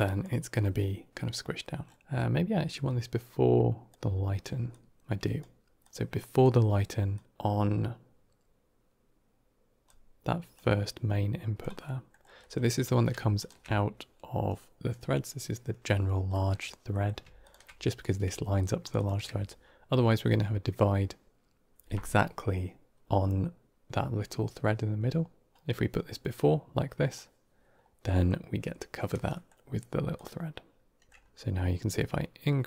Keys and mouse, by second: 1.9 middle drag, 2.6-3.8 drag, 4.6 alt+click, 5.7 click, 7.0-10.0 drag, 10.4-11.5 drag, 11.7 middle click, 13.3 ctrl+shift+click, 16.3 middle click, 16.8 middle click, 17.3 ctrl+shift+click, 18.7 ctrl+shift+click, 18.9 ctrl+shift+click, 25.5-27.0 drag, 27.9 middle click, 29.3 middle click, 30.0-30.9 drag, 31.8-32.6 drag.